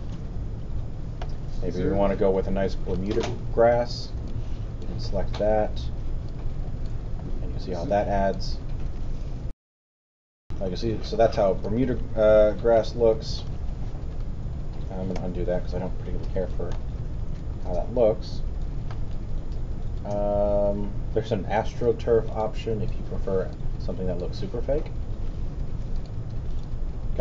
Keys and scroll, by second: 9.5 alt+super+., 10.2 alt+super+., 15.1 z, 25.6 q.